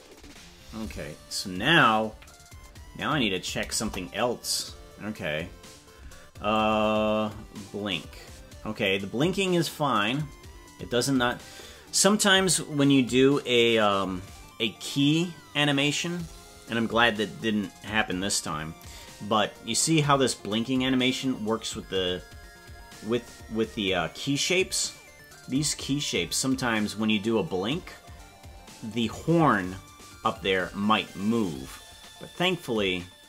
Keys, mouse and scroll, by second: 0.4-1.1 scroll down 16, 2.1 KP_Decimal, 3.8 KP_0, 4.8-5.5 scroll up 7, 6.6-9.0 drag, 9.3-11.4 drag, 19.1-21.8 drag, 22.5 scroll down 1, 24.1 scroll down 7, 26.4-33.2 drag.